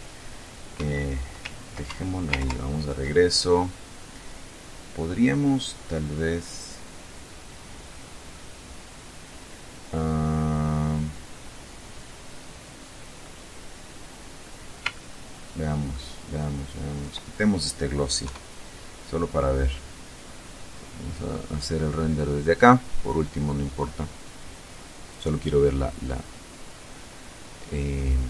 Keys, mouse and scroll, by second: 0.0 Escape, 1.2 ctrl+Escape, 1.8 ctrl+Left, 4.7-8.3 drag, 10.6-12.7 middle drag, 14.2-15.4 ctrl+middle drag, 15.9 ctrl+click, 17.5 F12.